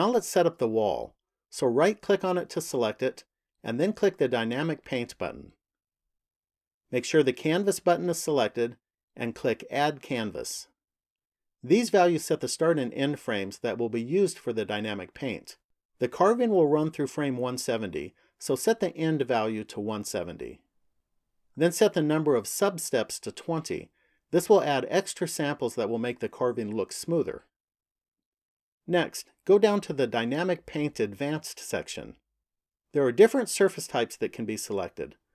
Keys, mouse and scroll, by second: 1.5 right click, 4.2 click, 8.7 click, 18.2 click, 23.2 click, 28.3 click, 34.0 click.